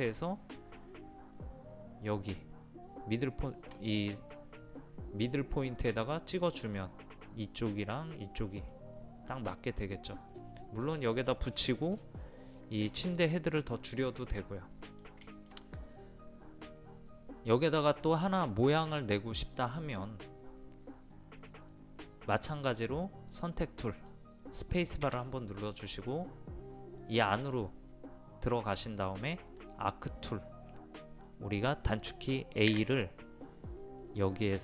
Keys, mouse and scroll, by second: 3.3 shift+click, 6.4-17.5 middle drag, 23.9 click, 25.5 space, 27.0-28.5 drag, 32.7 a, 34.2-34.6 drag.